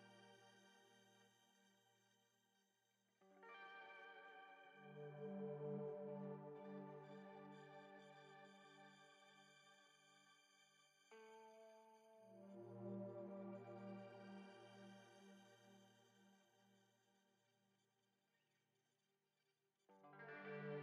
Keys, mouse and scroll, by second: 0.0 KP_Decimal, 0.8 scroll down 2, 1.3-3.0 shift+middle drag, 3.0 ctrl+r, 4.0 Tab, 4.7 ctrl+r, 7.6 click, 8.1-9.2 shift+middle drag, 9.2 shift+click, 9.7-10.7 shift+middle drag, 10.7 s, 13.1 s, 17.7 scroll down 1, 19.1 3, 19.4-20.5 drag, 20.5-20.8 shift+middle drag.